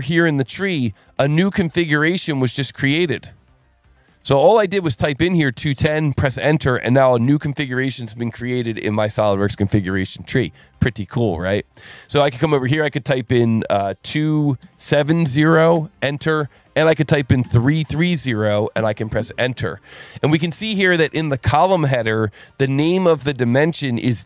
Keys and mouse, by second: 1.4 alt+1, 3.2 click, 4.8 ctrl+shift+click, 6.7 click, 10.1 alt+1, 12.2 click, 14.6 KP_2, 14.9 KP_7, 15.1 KP_0, 15.8 KP_Enter, 17.4 KP_3, 17.8 KP_0, 18.8 KP_Enter.